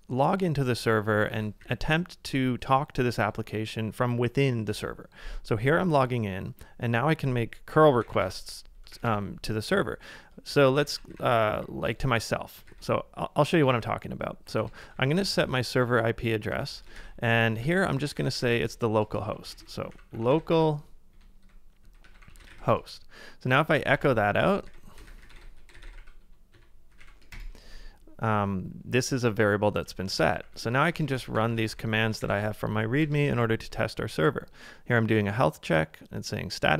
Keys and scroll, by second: 1.3-2.2 typing, 4.7 Return, 8.7-10.5 typing, 10.9 ctrl+w, 12.6-16.5 typing, 16.6 ctrl+c, 16.7 ctrl+c, 17.0 super+v, 17.7 ctrl+w, 18.0 ctrl+w, 18.2 ctrl+w, 19.4-19.9 typing, 21.1-22.0 typing, 23.2-24.4 typing, 30.2 ctrl+a, 30.7-32.2 typing, 32.2 super+v, 33.0 Return.